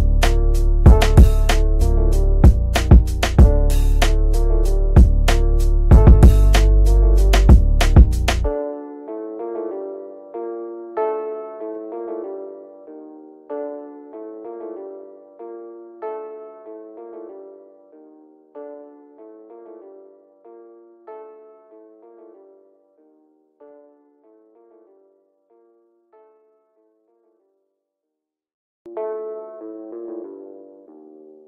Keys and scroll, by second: 18.9 g.